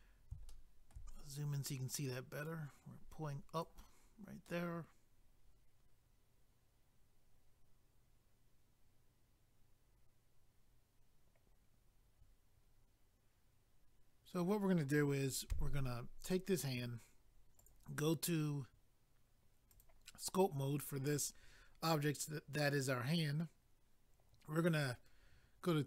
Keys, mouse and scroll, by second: 0.5 shift+middle click, 1.1-2.2 scroll up 1, 2.5 click, 4.0-4.4 scroll down 1, 4.4 middle click, 15.5 a, 17.6 click, 17.7 click, 19.7 click, 19.8 click.